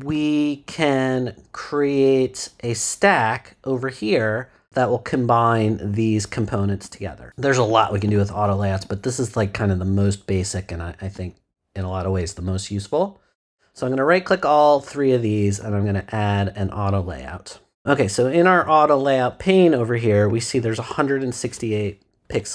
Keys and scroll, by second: 22.3 0.